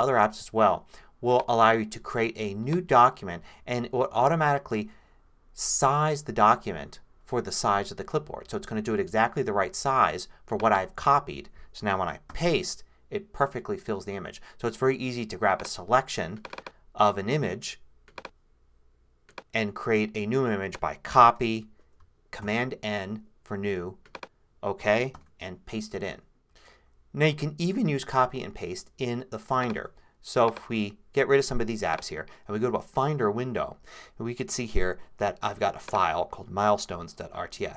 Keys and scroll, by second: 12.3 super+v, 21.2 super+c, 22.4 super+n, 25.1 super+v, 27.3 super+h, 29.8 super+h.